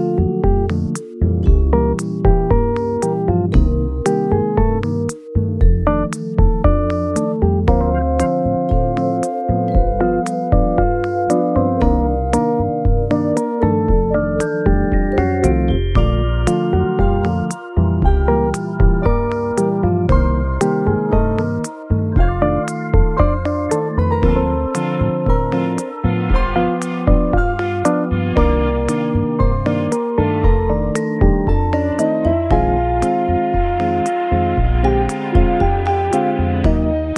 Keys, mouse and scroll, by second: 1.3 KP_1, 2.5 r, 3.6 g, 6.9 s, 8.6 KP_0, 9.8 scroll up 1, 15.5 scroll up 3, 23.1 scroll down 1, 24.1 scroll up 1, 29.5 shift+s, 30.8 Escape, 31.5 shift+a.